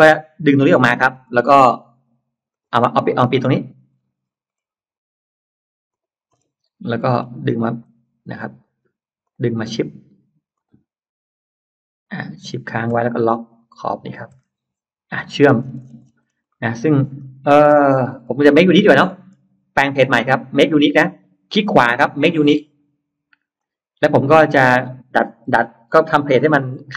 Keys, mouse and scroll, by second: 0.6 click, 1.0-1.8 scroll up 4, 2.4 click, 2.6-3.4 scroll down 4, 3.6-4.4 scroll up 4, 5.8 click, 6.2 scroll up 2, 6.7-7.0 scroll down 2, 7.6 click, 9.1 click, 10.4 click, 13.9 shift+click, 14.2-15.2 middle drag, 14.6-16.4 scroll down 3, 15.6 space, 16.4 middle click, 17.0-17.4 scroll up 1, 17.3 middle click, 17.6 scroll down 1, 18.0 scroll up 1, 18.8 middle click, 20.2 right click, 23.4 click, 24.0 click, 25.3 middle click, 25.8 p, 26.4 click.